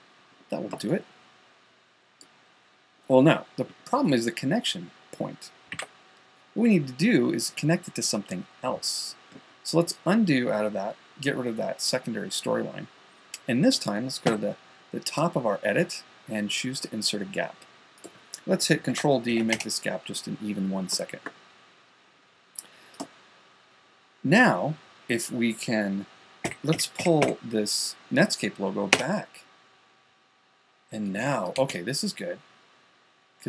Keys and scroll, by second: 6.2 super+z, 14.7 Home, 20.0 Caps_Lock, 27.0-28.6 typing.